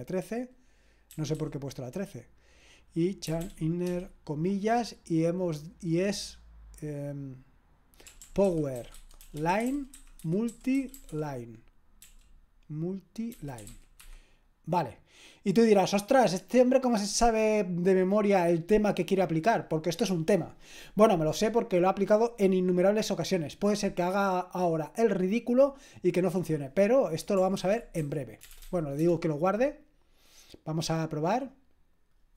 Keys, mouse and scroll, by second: 1.1 typing, 3.0-4.3 typing, 7.8-12.0 typing, 13.3-14.2 typing, 27.8-29.1 typing, 31.2-32.3 drag.